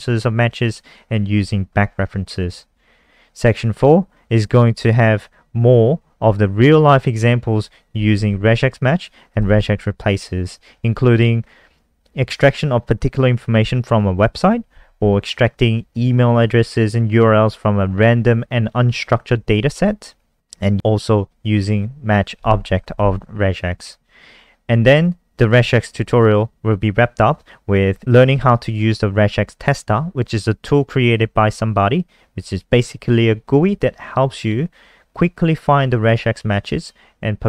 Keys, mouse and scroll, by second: 8.6 click, 9.3 click, 9.4 click, 23.6 click, 25.0 click.